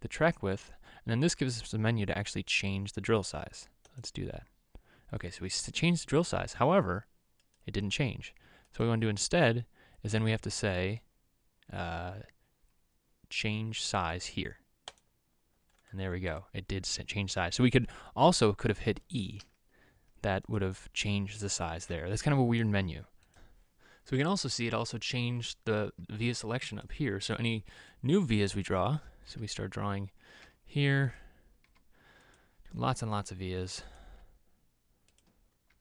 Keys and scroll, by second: 19.7 e, 29.8 x, 30.8 v, 32.1 v, 34.6 v.